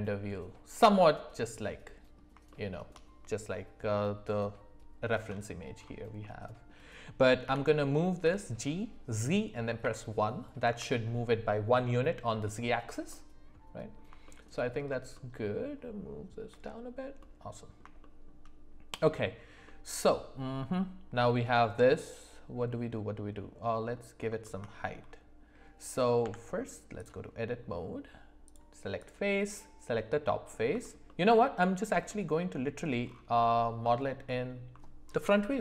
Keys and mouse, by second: 2.5 shift+middle click, 6.2 middle click, 7.5 g, 13.1 middle click, 14.2 shift+middle click, 15.1-16.5 shift+middle drag, 17.2 middle click, 18.0 shift+middle click, 19.6-24.2 middle drag, 24.4 shift+middle drag, 26.2 Tab, 28.4 click, 29.9 middle click, 31.0 alt+middle click, 32.1 middle click, 34.0 alt+middle click, 34.2 alt+middle click.